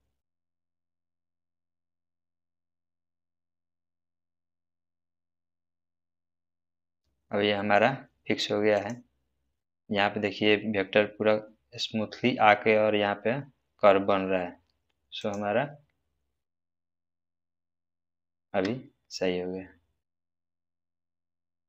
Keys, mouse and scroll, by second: 0.4 right click, 3.5 click, 5.0 space, 8.7 click, 15.2 click, 18.4 space.